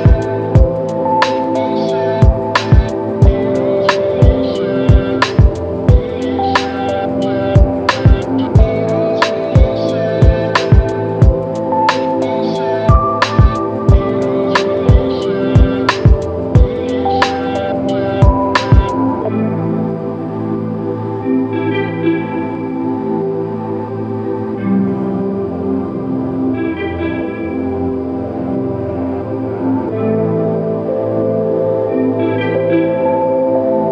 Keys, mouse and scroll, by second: 7.4 shift+click, 23.4 alt+m, 31.9 double click.